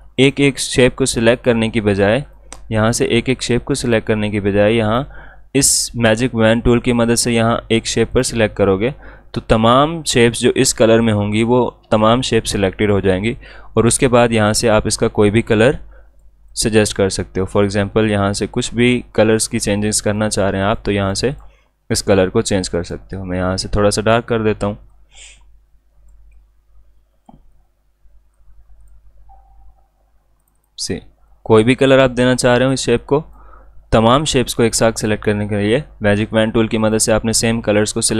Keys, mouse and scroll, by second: 0.1 click, 8.1 click, 14.4-38.1 drag.